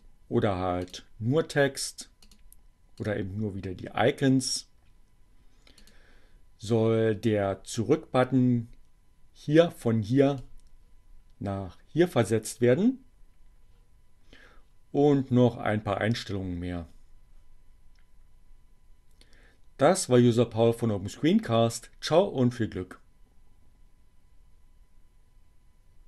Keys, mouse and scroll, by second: 0.9 click, 2.3 click, 3.0 click, 5.8 click.